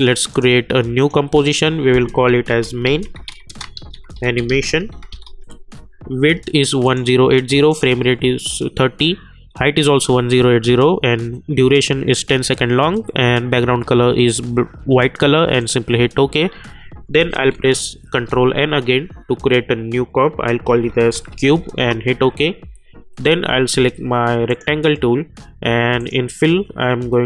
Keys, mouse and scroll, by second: 2.4-5.7 typing, 6.8 click, 15.6 click, 18.1 ctrl+n, 20.6-21.8 typing, 24.4 click, 24.5 click.